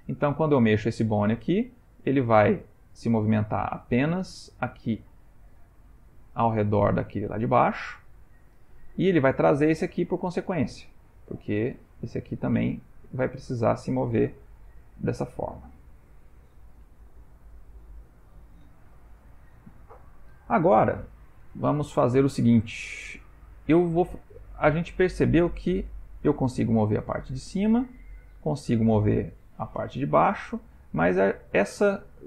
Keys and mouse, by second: 0.1 click, 0.6 g, 9.3 click, 10.0 g, 21.0 ctrl+middle click, 21.8 shift+middle click, 22.7 ctrl+middle click, 25.1 ctrl+middle click, 26.0 click, 26.8 g, 28.5 click, 28.7 g.